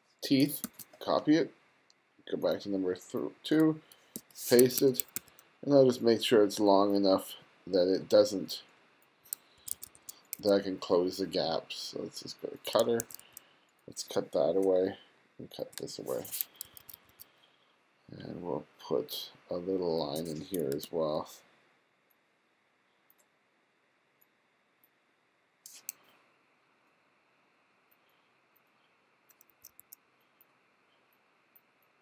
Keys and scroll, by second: 0.7 super+c, 4.2 super+v, 4.6 2, 9.6 1, 10.4 2, 12.8 2, 14.7 BackSpace, 15.8 BackSpace, 16.7 1, 20.9 super+v, 29.6 2.